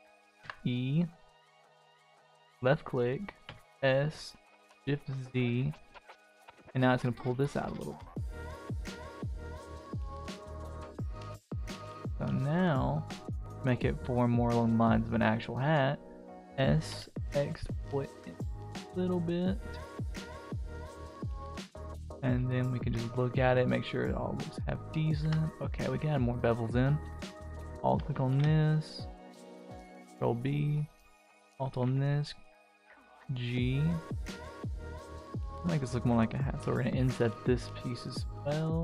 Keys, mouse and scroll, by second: 0.4 e, 3.4 s, 10.7 Tab, 11.0 click, 11.3-12.7 middle drag, 12.8 click, 13.0-13.8 middle drag, 13.9-15.0 scroll down 3, 14.3 middle drag, 15.0-15.3 middle drag, 15.6 s, 18.8-20.3 middle drag, 20.6 shift+middle drag, 21.0-21.7 middle drag, 21.8-22.4 middle drag, 22.6 shift+middle drag, 23.4-23.9 scroll up 3, 23.9-24.7 shift+middle drag, 24.9 middle click, 25.2 Tab, 25.5-26.1 scroll up 1, 26.1 click, 26.3 middle click, 27.1 alt+click, 28.3 ctrl+b, 30.1 click, 30.4-30.7 scroll up 2, 31.1 alt+click, 31.6 g, 34.0 middle click, 35.3 click, 35.7 click, 37.0 i.